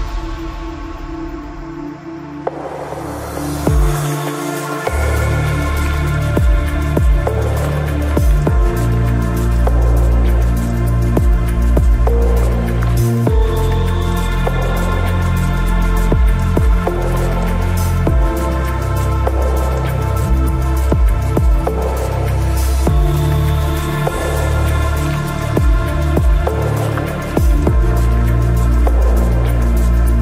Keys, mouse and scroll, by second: 0.5 ctrl+r, 7.8-8.4 Tab, 11.7 Tab, 12.6 ctrl+Tab, 13.3 middle click, 14.0-15.8 drag, 16.0-17.1 middle drag, 17.1 ctrl+r, 20.0-21.7 right drag, 21.6 click, 24.1 g, 25.3-29.2 right drag, 25.5 g, 27.0 g, 29.0 g.